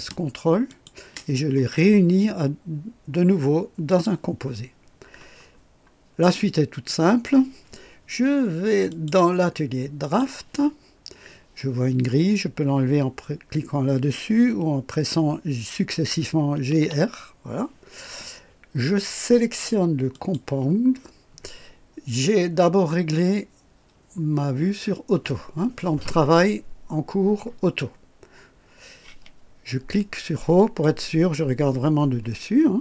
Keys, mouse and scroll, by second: 0.7 ctrl+click, 3.9 click, 5.4 scroll down 1, 6.2-7.0 right drag, 8.9 click, 10.0 click, 16.3-17.2 typing, 20.1 click, 30.5 click.